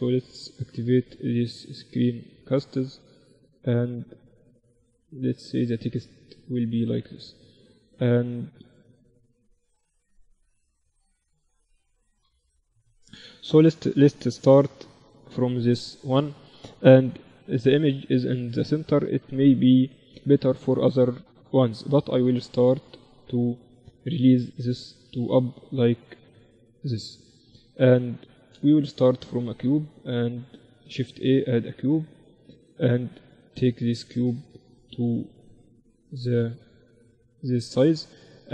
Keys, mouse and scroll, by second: 4.8-12.4 drag, 12.4 m, 13.5 n, 14.7 KP_1, 17.1 n, 19.7-21.7 drag, 21.3-26.0 middle drag, 22.2-26.2 drag, 27.5 n, 28.7-30.7 middle drag, 29.0 shift+a, 33.1-35.0 drag, 34.1 s, 37.5-38.5 drag.